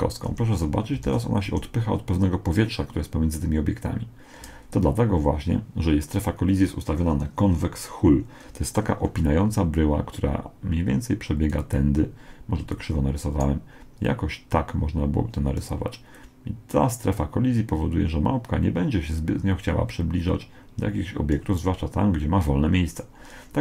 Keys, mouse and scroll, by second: 0.3 Escape, 1.1 alt+a, 1.5 Escape, 9.2-12.1 d, 9.8-11.5 drag, 12.6-16.2 d, 12.7-14.3 right drag, 14.1-15.8 drag, 14.3 middle click, 16.2-17.9 drag, 21.3 d.